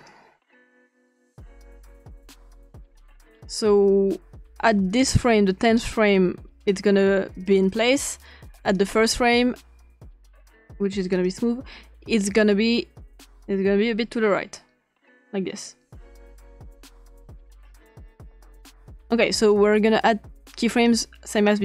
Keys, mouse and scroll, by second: 0.0 click, 1.0 click, 2.2 click, 5.0 click, 5.6 click, 6.7 click, 8.8 click, 10.2 click, 11.1 click, 13.2-19.0 drag, 20.8 click, 21.3 click.